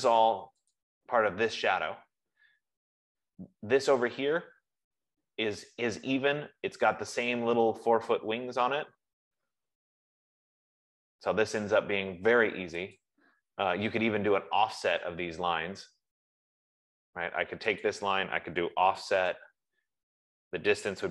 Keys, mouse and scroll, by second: 0.3 F15, 1.1 click, 2.4 scroll, 3.2-3.9 scroll, 5.0 scroll, 5.7 Escape, 6.7 middle click, 6.9 middle click, 7.0 middle click, 7.1 middle click, 7.6 middle click, 10.2 middle click, 10.2 middle click, 10.7 middle click, 11.3-11.6 scroll, 13.3 click, 14.7 Escape, 18.3 click, 19.0-21.1 typing.